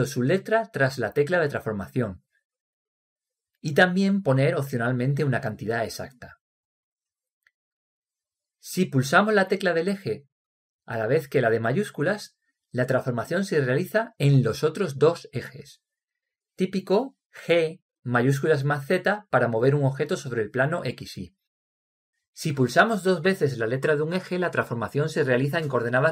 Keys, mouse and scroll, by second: 17.9 g.